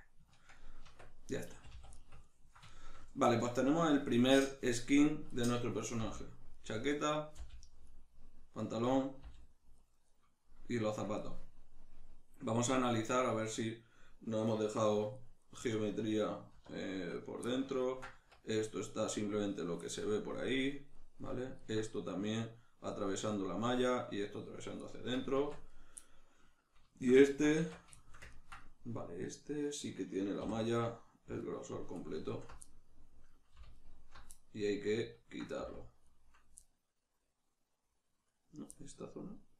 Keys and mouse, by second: 0.8 Tab, 1.5 a, 4.9 right click, 6.0 middle click, 6.0 g, 6.7 right click, 7.2 right click, 7.4 g, 8.0 right click, 8.8 right click, 9.3 g, 9.9 right click, 10.9-12.9 ctrl+middle drag, 12.9 right click, 15.2 shift+right click, 15.4 shift+right click, 16.5 \, 17.2 right click, 17.8-25.7 ctrl+middle drag, 18.1 Tab, 25.4 Tab, 25.7 right click, 26.9-31.4 shift+middle drag, 27.5 Tab, 30.4 3, 31.4 alt+right click, 32.6-33.7 middle drag, 33.7 alt+shift+right click, 34.3-39.5 middle drag, 35.6 z.